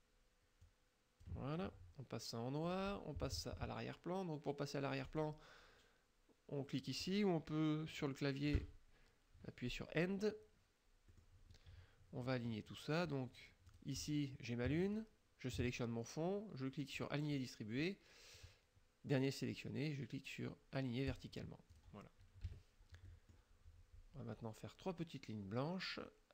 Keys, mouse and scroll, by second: 0.7 click, 2.7 click, 5.2 click, 8.6 End, 11.2 middle click, 13.7 click, 15.0 shift+click, 17.0 click, 21.2 click, 21.8 click, 22.5 KP_Subtract, 23.1 middle click.